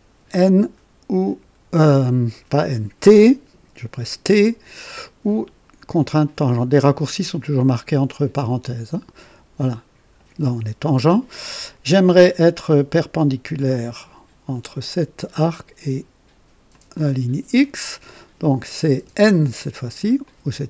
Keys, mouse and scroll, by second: 9.2 typing, 13.6 click, 16.6 click, 20.2 click.